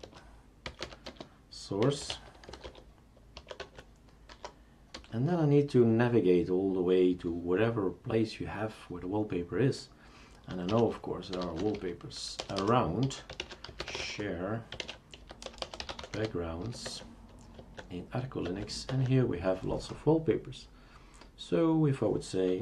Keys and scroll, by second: 0.0-4.9 typing, 10.7-17.1 typing, 17.6 Tab, 18.5 Tab, 18.9 Tab.